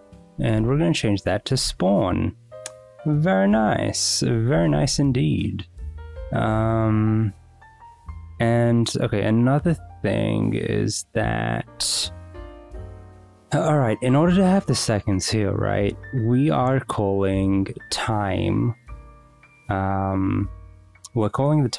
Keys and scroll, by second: 0.0-1.5 typing, 1.6 Return, 4.7 w, 4.8 Return.